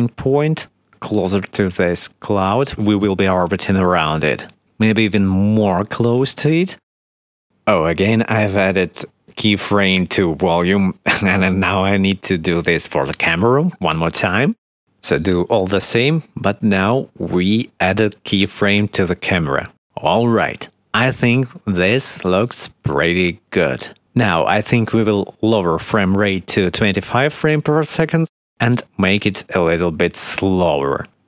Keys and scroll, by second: 1.7 s, 2.5 i, 5.0-6.7 typing, 11.8 shift+`, 12.0 w, 12.4 s, 13.9 i, 27.8 1, 27.9 5, 28.0 0, 28.2 Return.